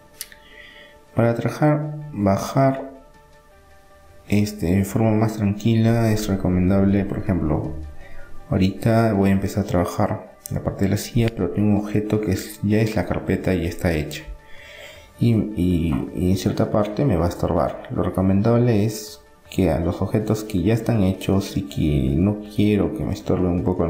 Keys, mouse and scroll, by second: 2.8-4.5 drag, 4.5-6.1 middle drag, 5.1 KP_3, 7.2 KP_1, 7.8-8.9 middle drag, 8.9-10.9 drag, 12.9-14.6 drag, 14.6 s, 17.6-22.2 middle drag, 23.2-23.8 middle drag.